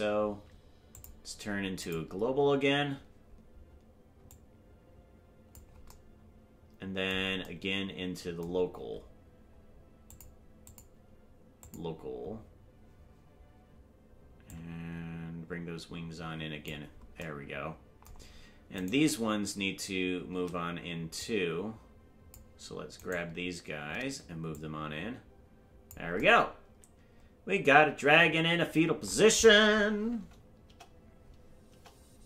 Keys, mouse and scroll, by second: 0.9-3.0 drag, 4.2-5.5 drag, 10.1 click, 10.6-12.9 drag, 14.5-16.7 drag, 19.1 right click, 21.1-22.3 drag, 23.3 right click, 24.5-25.9 drag, 30.6 KP_0.